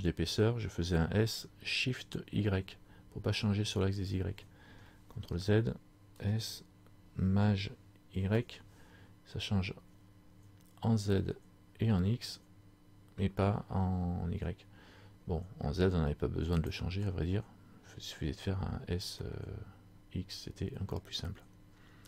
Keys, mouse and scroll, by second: 5.2 ctrl+z, 6.2 s, 19.4 middle click.